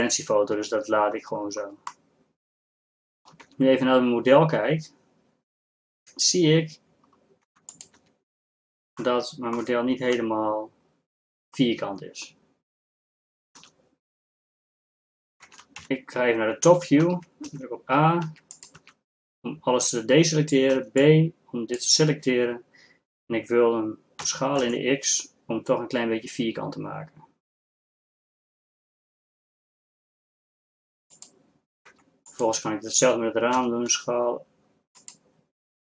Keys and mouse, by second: 2.7 middle click, 3.5 Tab, 7.7 Tab, 8.0 Tab, 10.4 KP_7, 13.6 z, 15.5 ctrl+Tab, 17.1 a, 17.5 b, 18.9 a, 24.3 s, 31.9 Tab, 33.6 s.